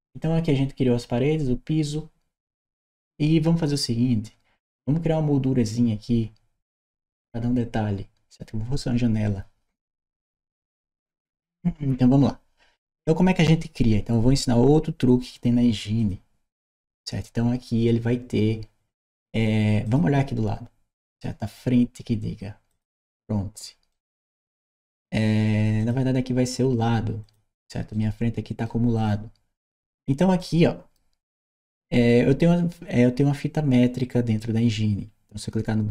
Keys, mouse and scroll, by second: 15.8 click, 19.7 click, 22.5 click, 23.7 right click, 25.6 click, 27.1 click, 27.8 right click, 28.8 click, 29.5-30.0 scroll up 2, 30.2 right click.